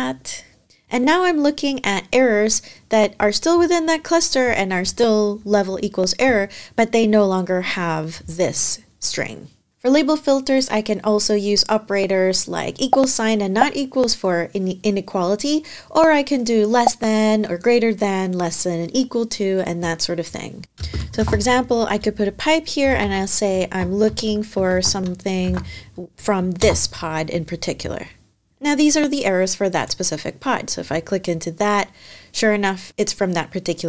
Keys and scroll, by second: 20.6 space, 22.3-24.9 typing, 25.2 super+v, 26.4 shift+Return.